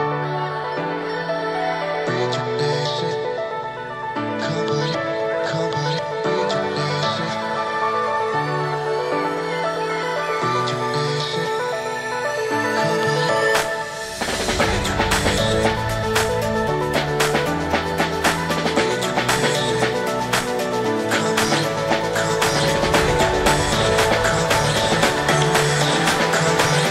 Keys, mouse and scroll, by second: 0.0-0.5 middle drag, 0.5-1.0 scroll up 2, 1.0 space, 1.6 g, 2.5 ctrl+z, 2.9 right click, 3.3 g, 12.3 space, 12.6 Tab, 13.2 Tab, 13.4 right click, 13.6 Tab, 14.4 scroll down 1, 14.7 w, 16.0 Tab, 16.5 right click, 17.3 space, 17.6 g, 25.9 space, 26.4-26.9 middle drag.